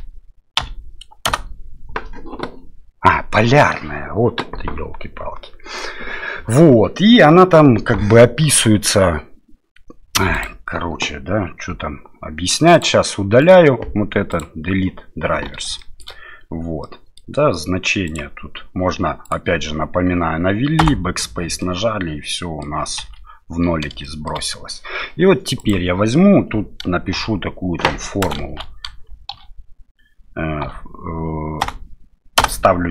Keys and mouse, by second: 10.5-12.9 drag, 13.5-14.5 right drag, 15.8 shift+middle click, 16.8 middle click, 18.0-19.3 drag, 20.8 BackSpace, 21.6-22.6 middle drag, 23.0 KP_7, 24.0 shift+middle click, 25.7-32.9 drag.